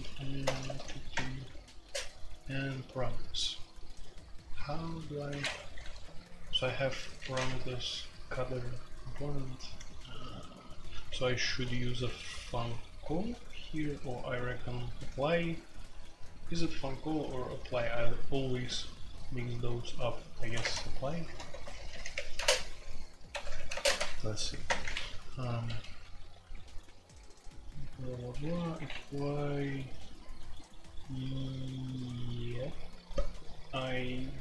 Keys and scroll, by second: 0.0-34.4 typing, 5.4 Escape, 20.6 Return, 24.6 Return, 25.7 ctrl+d, 25.8 ctrl+d.